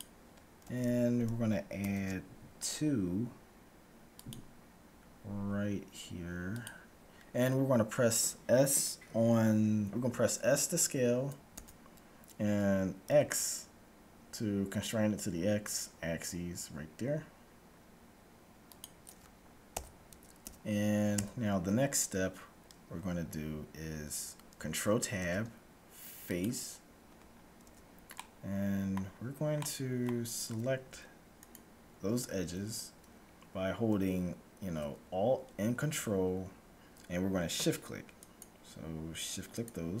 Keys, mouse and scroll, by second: 0.6 a, 1.8 ctrl+r, 11.6 s, 19.8 a, 20.6 z, 21.0 z, 25.1 ctrl+Tab, 27.5-31.1 middle drag, 27.6 z, 31.1-33.0 right drag, 38.1-40.0 right drag.